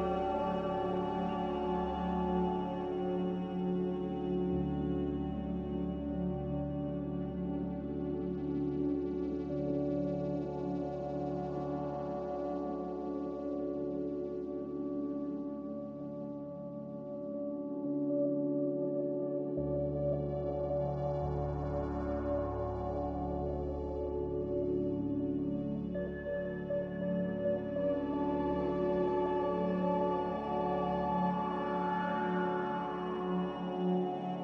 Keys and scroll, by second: 5.2 b, 10.2 a, 13.8 m, 24.1 a.